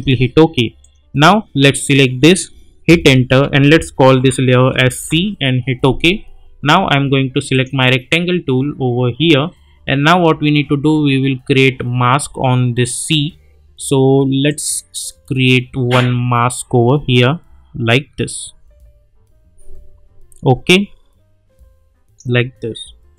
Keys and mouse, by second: 2.9 Return, 4.1 shift+c, 5.0 Return, 7.5 click, 14.4-22.3 drag.